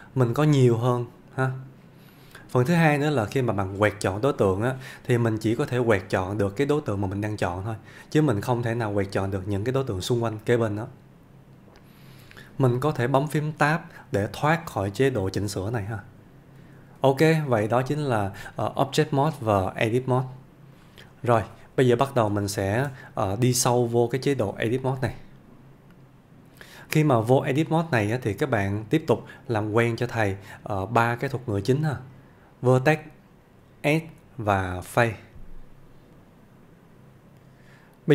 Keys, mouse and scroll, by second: 36.1 F1.